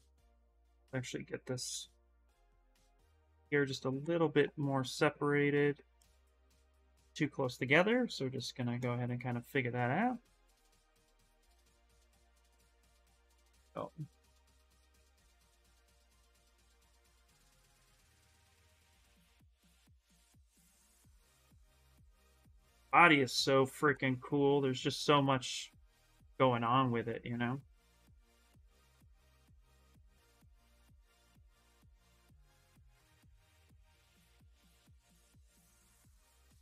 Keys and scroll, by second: 25.1 s.